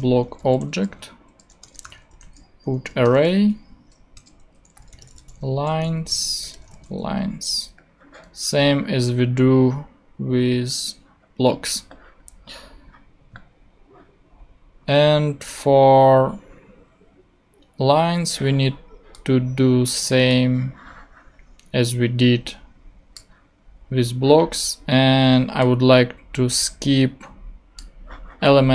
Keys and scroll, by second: 0.4-2.7 typing, 2.9 shift+Return, 3.7 shift+Return, 4.2-7.0 typing.